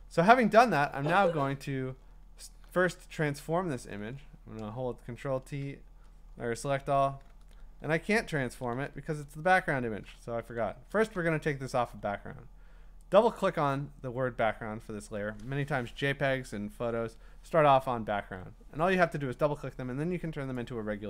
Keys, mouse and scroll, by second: 2.6 ctrl+t, 3.8 ctrl+a, 8.5 ctrl+t, 8.7 ctrl+t, 9.3 Escape, 10.5 ctrl+d, 13.1 click, 13.4 click, 20.6 click.